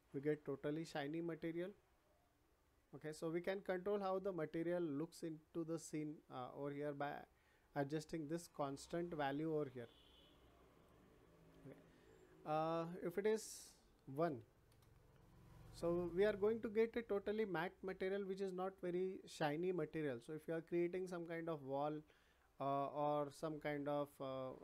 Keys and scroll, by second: 14.3 1, 14.6 Return.